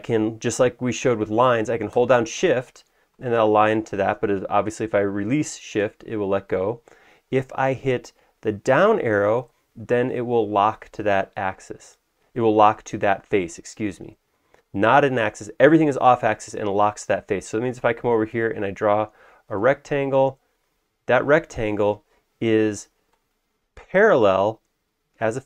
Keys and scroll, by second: 9.2 Down.